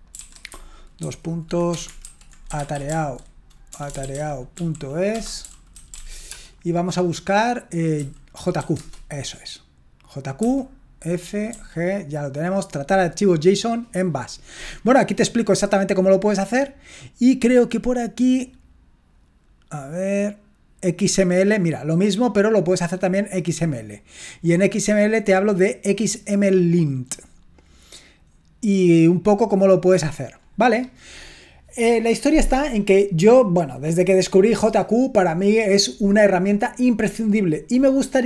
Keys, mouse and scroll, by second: 0.0-6.5 typing, 8.3-9.1 typing, 11.3-12.0 typing, 16.2-19.5 scroll down 1, 19.5-21.0 scroll down 1, 21.0-27.2 drag, 27.2-27.7 scroll down 2, 27.7-30.4 scroll down 1, 30.4-30.8 scroll down 1, 30.8-38.2 scroll up 2.